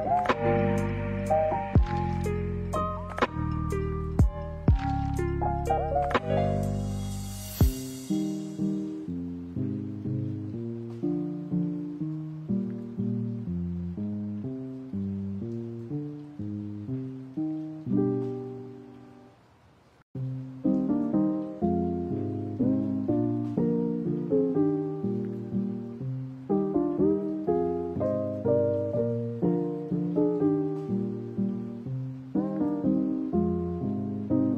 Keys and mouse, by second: 2.0 middle click, 2.7-3.2 drag, 4.4 shift+a, 9.8 g, 11.4 middle click, 13.0 shift+a, 16.8 g, 20.4 middle click, 21.2 right click, 21.9 g, 23.9 right click, 27.8 click, 30.9 click, 32.7 click.